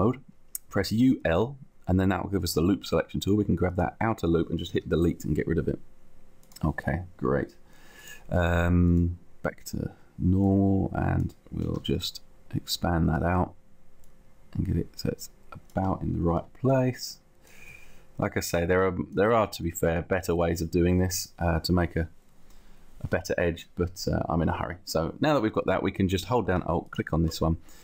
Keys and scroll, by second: 0.8 u, 1.3 l, 3.2 l, 4.8 Delete, 5.8 Delete, 11.8 t, 13.2 space, 14.6 space, 16.4 t, 17.5 space, 18.5 space, 19.4 t, 20.4 t.